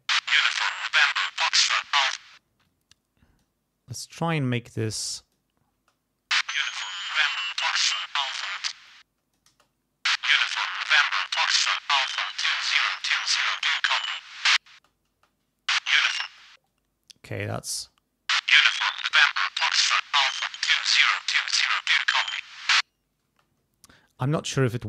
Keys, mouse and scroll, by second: 2.2 space, 2.6 click, 3.9 scroll up 2, 4.8 click, 5.7 space, 8.7 space, 8.9 scroll up 1, 9.0 middle click, 9.5 space, 13.1-13.8 scroll up 1, 14.7 space, 16.3 space, 16.7-17.7 scroll up 1, 17.7 scroll up 1, 17.7 space, 23.3 space.